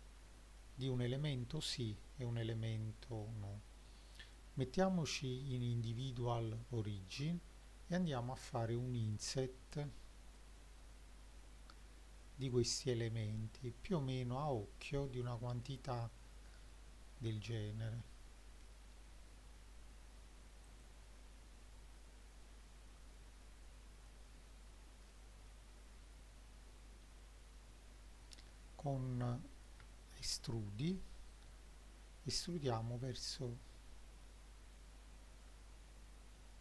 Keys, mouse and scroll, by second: 0.6 middle click, 2.1-2.7 scroll up 1, 2.7 middle click, 4.3-5.7 drag, 9.1 click, 10.4 click, 10.8 click, 16.2-17.3 scroll down 2, 17.4-18.7 shift+middle drag, 20.7 click, 21.6-22.1 middle drag, 22.6-23.4 scroll up 2, 23.4-24.2 middle drag, 24.7-25.1 scroll up 1, 25.1-25.6 middle drag, 29.8 e.